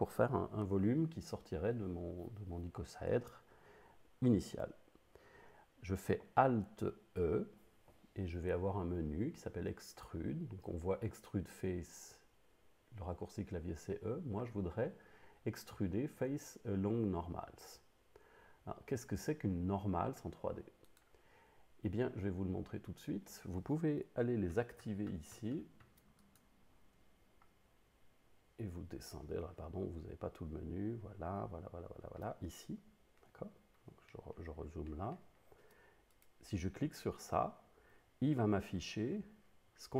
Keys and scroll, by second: 7.0 alt+e.